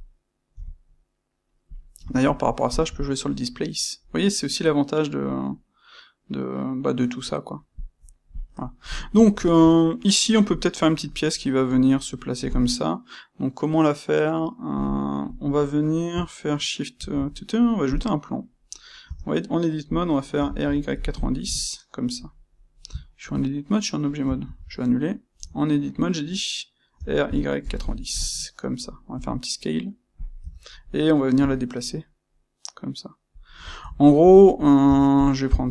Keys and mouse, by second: 0.5 c, 1.6 click, 1.9 space, 8.3 click, 8.5-33.4 middle drag, 14.7 KP_3, 16.9 shift+c, 17.9 shift+c, 18.9 Tab, 21.4 Return, 24.5 ctrl+z, 25.3 Tab, 28.1 Return, 29.0 s, 30.2 click, 30.3 Tab, 33.4 click, 33.7-35.1 ctrl+shift+middle drag, 34.8 Tab, 35.1 click.